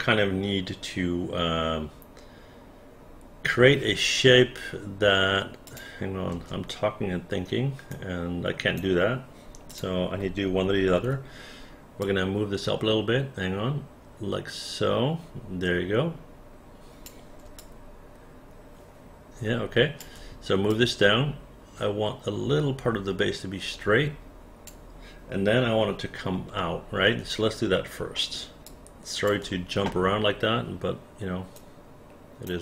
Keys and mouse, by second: 5.7 click, 6.3 space, 7.9 right click, 9.7 click, 11.0 w, 12.0-17.0 drag, 17.6-20.0 alt+drag, 20.7-24.7 drag, 26.6 alt+middle click, 28.2 alt+middle click, 28.7 alt+click, 31.6 right click.